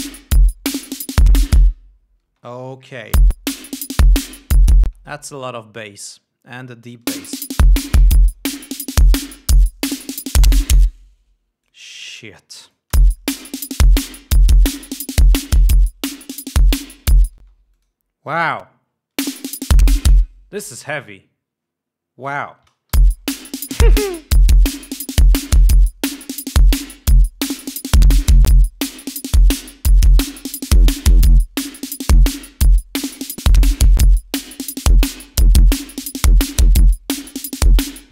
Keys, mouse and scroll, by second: 1.2 click, 2.7 space, 3.6 l, 4.4 click, 5.3 space, 7.5 space, 8.6-9.9 drag, 10.0 scroll down 2, 10.4-12.3 drag, 12.7 space, 13.0-13.4 drag, 13.1 scroll up 1, 13.4 space, 14.4 click, 15.4 click, 15.8 click, 17.3 click, 17.8 space, 18.2 click, 18.7 click, 19.6 space, 23.0 space, 23.4 l, 24.9 click, 26.0 click, 27.1-31.2 drag, 32.1-33.7 drag, 33.9-34.3 drag, 35.1-35.5 drag, 36.2-37.2 drag, 37.3-38.1 drag.